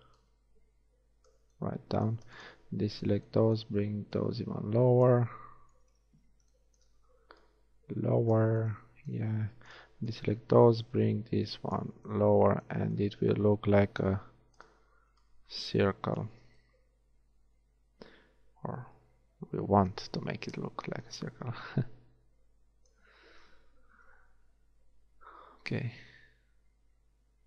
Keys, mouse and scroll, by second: 1.3 click, 1.7 middle click, 2.5-5.9 drag, 4.3 right click, 5.9 KP_1, 6.7 middle click, 7.5 click, 10.1-12.0 drag, 10.9 right click, 12.0 a, 12.9 Tab, 14.3 Tab, 16.5 Tab, 20.3 Tab, 24.2 ctrl+r.